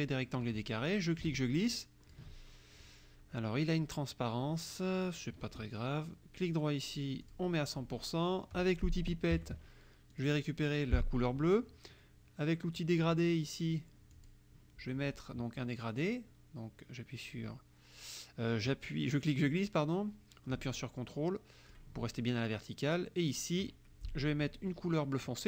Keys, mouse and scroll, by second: 1.0-2.4 drag, 6.4 right click, 7.3 click, 9.4 F7, 10.1 click, 14.2 click, 17.2-21.9 drag, 23.3 click.